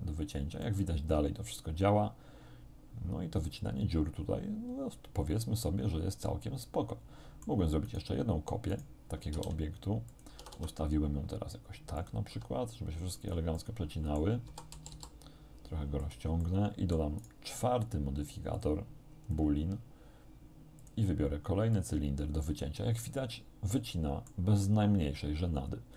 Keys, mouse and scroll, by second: 0.7-7.7 middle drag, 7.9 right click, 8.7 right click, 9.4 shift+d, 10.1 click, 10.4 r, 12.0 click, 12.3 g, 13.2 click, 13.9 middle click, 14.5 s, 14.8 z, 16.1 click, 18.6 click, 19.3 middle click, 19.3-19.7 scroll down 1, 20.9 click, 21.8 click, 23.1-24.5 middle drag, 24.7-25.9 middle drag.